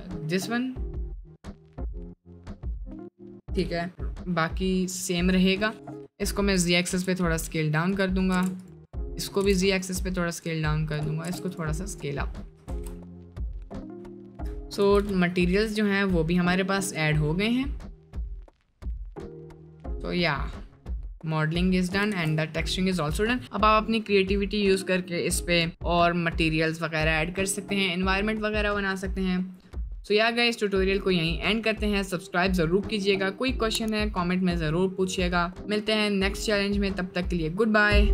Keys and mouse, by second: 19.3 middle click, 19.8-21.7 middle drag, 22.2 ctrl+s, 22.5-22.8 middle drag, 30.7 middle click, 31.8-32.4 middle drag.